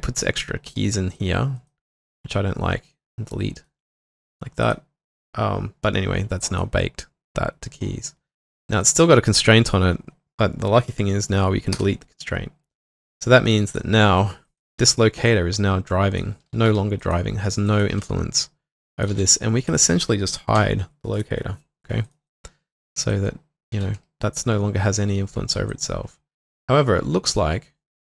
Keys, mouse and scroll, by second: 2.3 right click, 11.7 right click, 12.8 Delete, 14.7 typing, 16.7 typing, 17.9 typing, 19.1 typing, 20.6 typing, 22.3 double click, 22.8 typing, 23.3 double click.